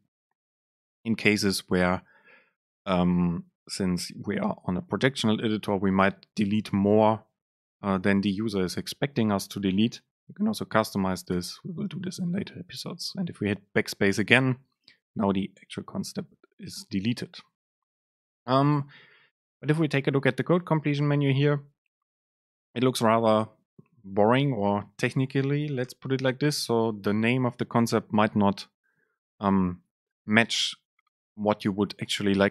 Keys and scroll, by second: 11.5 BackSpace, 19.0 super+space.